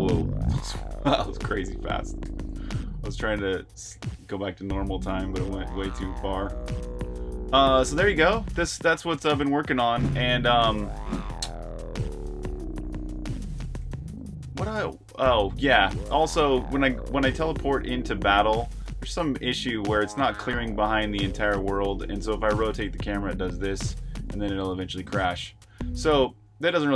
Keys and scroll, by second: 0.0-0.3 typing, 6.6-18.9 typing, 20.9 e, 26.4 super+q.